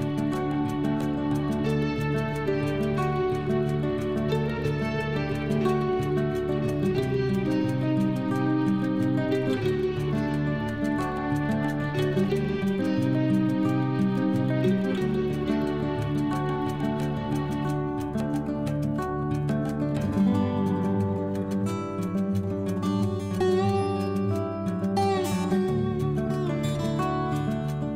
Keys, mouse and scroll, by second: 0.0-2.0 typing, 3.3-11.1 typing, 16.2 typing, 17.8-21.8 typing, 25.0-27.9 typing.